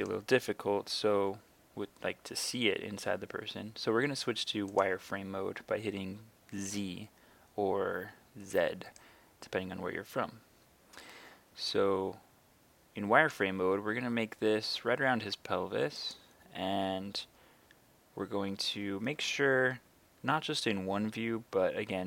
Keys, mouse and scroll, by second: 4.8 click, 6.6 z, 9.0-13.5 right drag, 16.0 click.